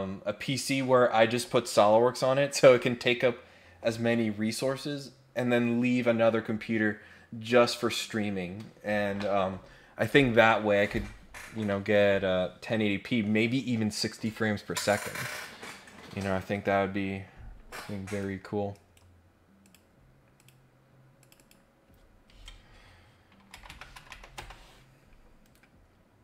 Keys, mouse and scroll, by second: 18.1 click, 18.7 right click, 19.6 click, 20.3 click, 21.2 click, 25.4 Escape.